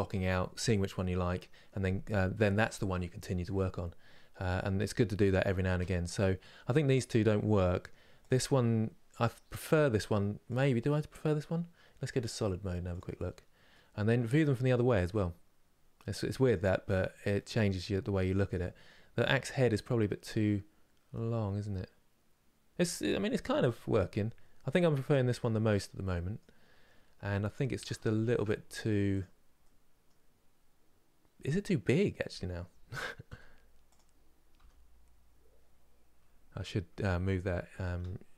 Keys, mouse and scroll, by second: 8.0 click, 9.3 click, 12.6 click, 13.4-15.2 middle drag, 15.2 scroll down 1, 15.7 middle click, 16.2 click, 17.0-26.4 middle drag, 26.4 scroll up 3, 27.6 shift+middle click, 28.4-28.9 scroll up 1, 28.9 click, 29.3-33.0 middle drag, 33.0 s.